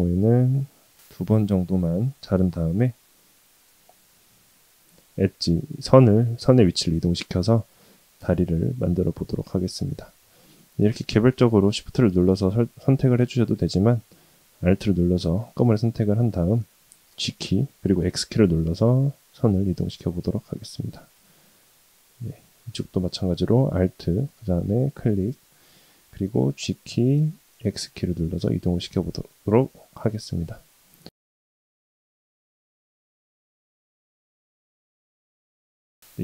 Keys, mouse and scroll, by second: 2.4 click, 3.2 click, 4.1 2, 4.6 click, 9.1 shift+click, 10.3 click, 11.2 shift+click, 11.8 shift+click, 13.5 click, 14.5 alt+click, 17.2 g, 22.1 click, 23.6 alt+click, 26.5 g, 32.2 click, 32.5 alt+click, 32.9 g, 34.2 alt+click, 35.0 g.